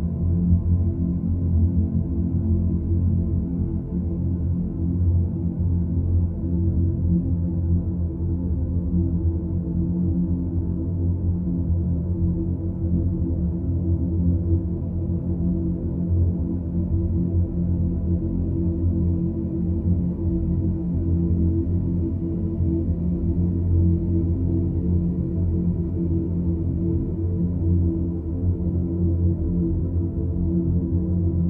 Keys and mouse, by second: 6.6-7.7 middle drag, 8.4 ctrl+z, 9.3 shift+click, 9.8-10.8 middle drag, 11.4 shift+click, 12.0 middle click, 13.4 ctrl+b, 25.5 Tab, 26.8-27.5 middle drag, 27.7 Tab, 28.1-28.6 middle drag, 29.4 ctrl+z.